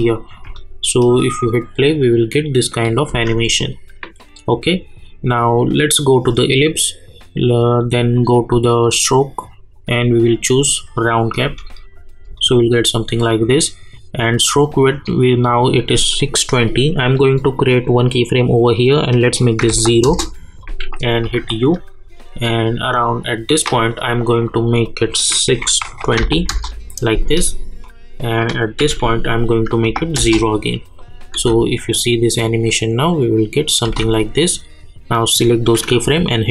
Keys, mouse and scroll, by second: 0.4 space, 3.3 space, 3.6-6.3 drag, 9.0 click, 11.4 space, 13.2-17.7 drag, 20.0 Return, 20.6 click, 21.2 u, 22.4-24.8 drag, 26.5 Return, 27.8-29.7 drag, 30.1 Return, 31.0 click, 31.3 space, 33.8 space, 35.4 click, 36.0 F9.